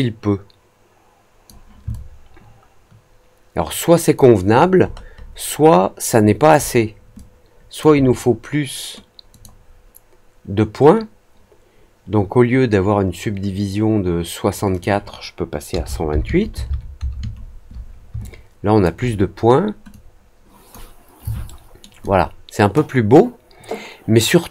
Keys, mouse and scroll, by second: 1.8-4.1 alt+drag, 4.5 alt+middle click, 4.8 alt+middle click, 5.1 alt+middle click, 5.5 alt+middle click, 6.2 alt+middle click, 6.5 alt+middle click, 7.1-7.7 alt+drag, 9.2 click, 14.6 click, 18.2-18.8 alt+drag, 19.8-20.6 drag, 21.4-21.7 alt+middle drag, 21.9-24.5 alt+drag.